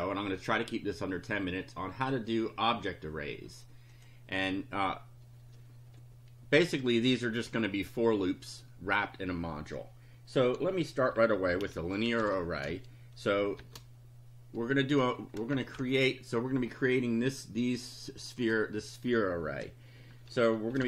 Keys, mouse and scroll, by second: 4.0 click, 10.9-13.6 typing, 15.5 shift+Home, 15.8 shift+Delete, 18.4 click, 20.5-20.8 typing.